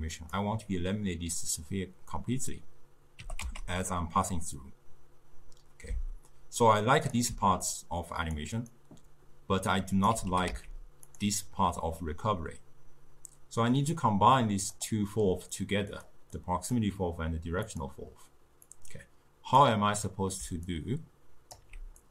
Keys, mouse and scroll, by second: 3.3 g, 7.3 d, 7.8 click, 8.4 d, 8.8-10.2 right drag, 10.2 d, 10.3 g, 14.5-16.0 drag, 16.4-17.8 drag, 18.8 click, 19.2-20.7 drag, 20.7-22.1 alt+right drag.